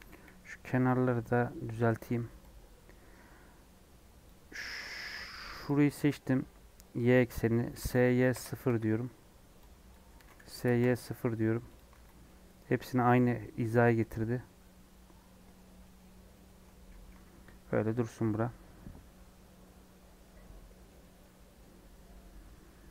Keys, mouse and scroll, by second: 0.0 KP_1, 1.1 Tab, 1.6 1, 1.9 alt+z, 4.2 click, 5.6 click, 6.0-6.6 scroll down 4, 7.1 scroll up 1, 7.7 scroll up 4, 7.7 s, 9.2-9.6 scroll down 2, 9.9 click, 10.2 s, 11.7 click, 11.9 alt+z, 12.0 scroll down 1, 12.2 middle click, 12.6-13.2 scroll up 3, 13.7 middle click, 14.0 Tab, 14.5 middle click, 15.5 scroll up 1, 15.8-17.2 middle drag, 17.2 /, 17.6-18.2 scroll down 4, 21.1-22.2 scroll down 2, 22.2 scroll down 2, 22.4-22.9 middle drag.